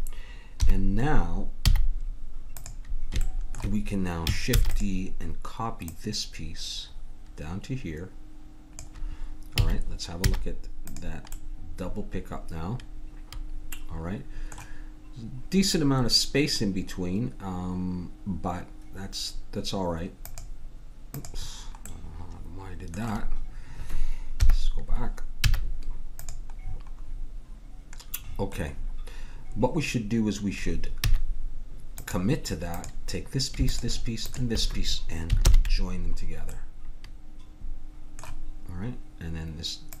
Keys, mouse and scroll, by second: 0.6 KP_1, 1.7 z, 4.6 shift+d, 5.8-7.6 drag, 9.6 a, 10.3 z, 11.4 middle click, 22.0 middle click, 24.4 KP_1, 25.4 z, 31.0 z, 32.8-36.0 drag, 35.4 ctrl+j, 36.5-38.3 middle drag, 39.9-40.0 drag.